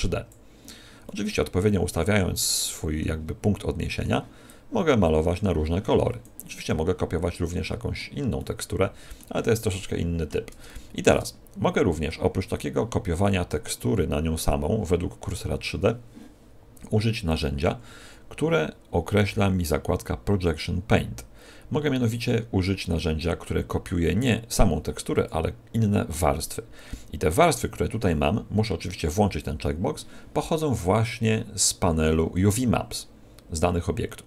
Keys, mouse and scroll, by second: 1.0 middle click, 3.5 middle click, 4.4 click, 6.6 middle click, 8.3 middle click, 10.6 shift+middle click, 10.7 shift+middle click, 11.3 scroll down 4, 12.0 middle click, 17.2 click, 25.1 click.